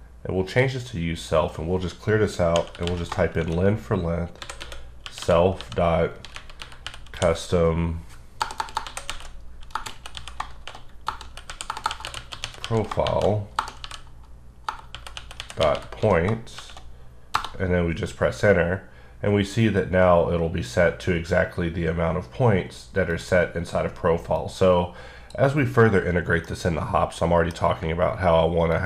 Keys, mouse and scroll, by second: 0.5 click, 1.2 click, 2.6-3.4 typing, 4.6-5.2 typing, 6.2-7.1 typing, 8.4-13.6 typing, 14.9-16.6 typing, 17.4 Return, 23.1 click, 24.7 click, 26.9-27.8 middle drag.